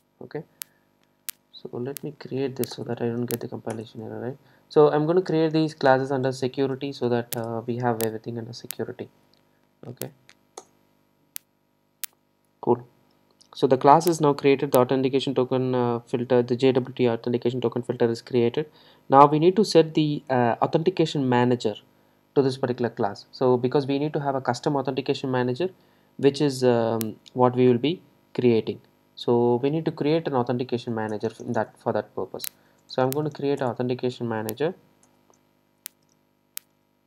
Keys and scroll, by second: 2.8 alt+Return, 9.1 super+e, 33.6 Return.